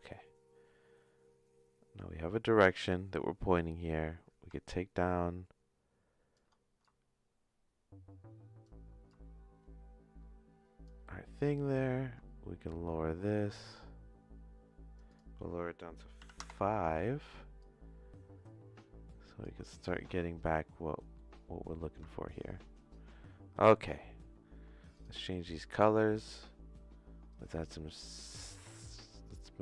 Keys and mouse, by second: 0.0-2.0 drag, 3.6 middle click, 4.6-6.3 shift+drag, 6.8-8.6 shift+drag, 9.1-10.8 shift+drag, 11.3-14.9 drag, 15.0-17.0 shift+drag, 17.6-19.5 shift+drag, 19.8 middle click, 20.2 shift+middle click, 20.9 middle click, 21.7 middle click, 22.1 shift+middle click, 24.9 click.